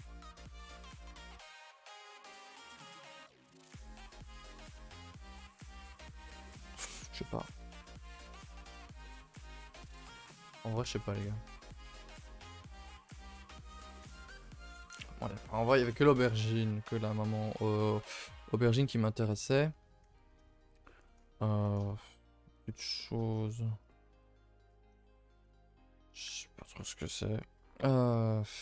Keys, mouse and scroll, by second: 7.8 a, 8.0 a, 8.6 shift+middle click, 9.3 scroll down 2, 9.5 shift+middle click, 9.8-10.1 scroll up 1, 10.1 shift+middle click, 10.5 a, 10.6 a, 14.6-17.0 scroll up 2, 17.9 scroll up 1, 18.8-19.3 scroll down 3, 19.3-19.7 shift+middle drag, 19.7 a, 19.8 a, 20.5-21.1 shift+middle drag, 21.1-21.6 scroll up 4, 21.6-21.9 shift+middle drag, 21.9 scroll down 2, 22.2 middle click, 22.4-22.9 scroll up 7, 22.9-23.2 shift+middle drag, 23.2-23.9 scroll down 5, 23.9 click, 24.1 h, 24.6 KP_0, 25.2 shift+middle click, 25.4-25.8 scroll up 4, 25.8-28.1 shift+middle drag, 28.1-28.6 scroll down 2.